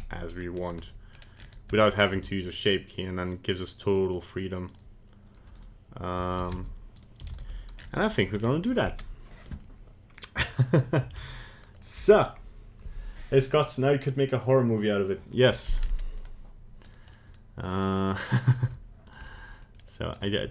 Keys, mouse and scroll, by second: 0.0 middle click, 0.4 scroll down 2, 0.8 middle click, 1.2 scroll down 1, 1.3 scroll up 3, 1.7 middle click, 2.1 g, 5.5 right click, 6.4 alt+r, 6.5 alt+g, 6.9 alt+right click, 7.2 alt+r, 7.3 alt+g, 7.7 scroll up 4, 8.1 right click, 8.3-8.9 scroll down 2, 10.5 click, 11.7 shift+click, 15.7-16.2 scroll up 4, 16.8 right click, 17.1 middle click, 18.2 scroll down 1, 18.6 g, 19.5 middle click, 19.8 middle click, 20.3 g.